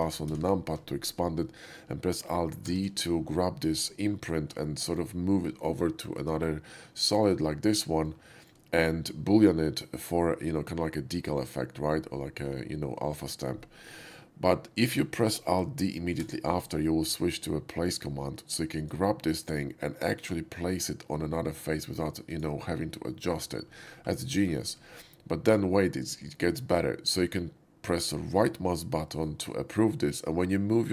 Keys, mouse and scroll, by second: 0.3 ctrl+shift+KP_Add, 2.6 alt+d, 3.3 middle click, 4.5-4.9 middle drag, 7.0 shift+middle drag, 8.1-8.4 shift+middle drag, 16.2 ctrl+d, 18.7 click, 22.3 click, 23.6 middle click, 24.0 middle click, 24.3 shift+middle drag, 24.9 shift+middle drag, 25.3 shift+middle click, 28.9 right click.